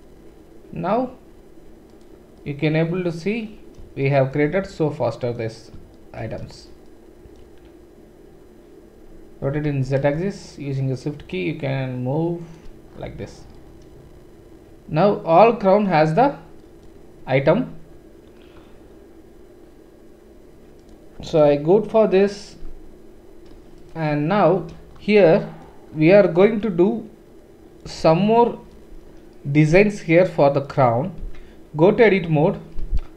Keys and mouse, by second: 2.3-10.8 middle drag, 9.4 r, 12.6 click, 12.8-23.7 middle drag, 23.7 click, 23.9-26.6 middle drag, 30.6 click, 31.2 Tab, 31.2 typing.